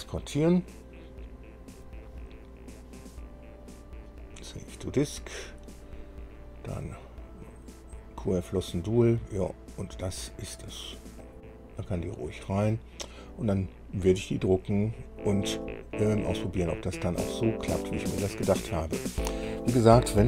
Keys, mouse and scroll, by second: 2.1-3.1 drag, 4.4 click, 11.4 click.